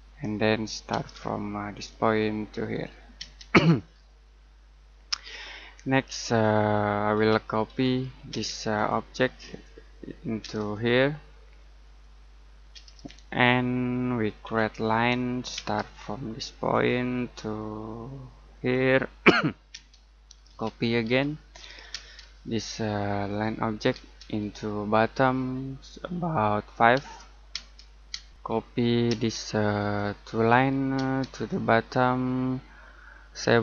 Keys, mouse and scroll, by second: 0.4-0.9 scroll up 1, 0.9 space, 1.7 click, 3.1 space, 3.6-4.2 scroll down 1, 4.2 middle click, 5.3-5.7 scroll down 1, 5.7 middle click, 7.1-8.3 typing, 8.7 click, 10.4 space, 10.7 click, 12.7 space, 13.0 middle click, 14.4 l, 15.5 space, 16.7 click, 19.7-21.9 typing, 22.5 click, 23.9 space, 24.3 click, 27.5-29.1 typing, 29.7 click, 30.9 space, 31.3 click, 33.3-33.6 typing.